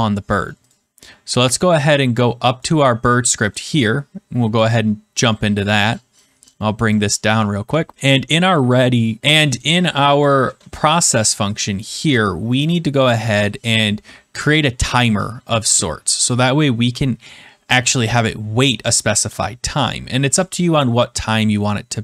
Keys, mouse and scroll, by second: 0.6-1.7 drag, 2.5 click, 3.5 click, 4.6 click, 6.8 click, 9.5 click, 9.9 BackSpace, 10.2 click, 10.4 BackSpace, 11.5 click, 12.0 Return, 13.3 click, 16.2 click, 18.9 click, 20.3 click.